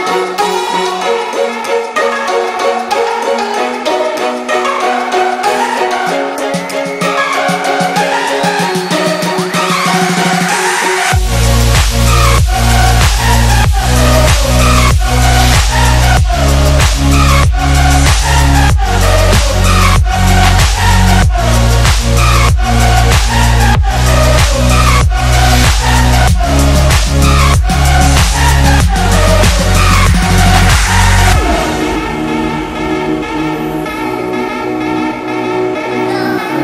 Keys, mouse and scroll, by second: 3.8-4.7 shift+drag, 6.1 click, 8.9 space, 9.0-9.8 click, 11.4 space, 11.5 click, 11.6-12.2 space, 14.8-15.3 click, 15.6 ctrl+-, 15.8 space, 16.8 click, 17.2-18.1 alt+click, 18.7 ctrl+=, 19.0 space, 19.1 click, 19.3-20.0 space, 21.0 click, 22.2 right click, 23.0 click, 24.3 BackSpace, 25.2 click, 25.8-29.1 alt+drag, 29.6 space, 29.7 click, 29.9 space, 30.6 click, 30.8-31.3 space, 31.9 click, 33.8 BackSpace, 34.1 space, 34.2-34.7 click, 35.5-36.6 alt+drag.